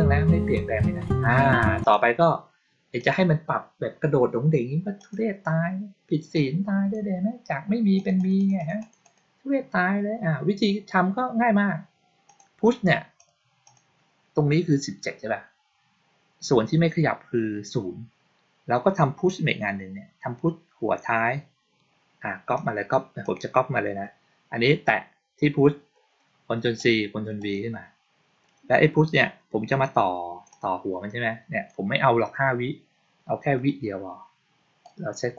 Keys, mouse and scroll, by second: 1.7 click, 2.8 click, 4.8 click, 6.2 click, 7.8 click, 8.0 click, 8.2 click, 8.4 click, 8.7 click, 8.9 click, 12.1 click, 13.0 click, 13.5 click, 22.4 click, 23.1 click, 26.6 click, 27.2 click, 30.4-31.5 drag, 34.7-35.2 drag.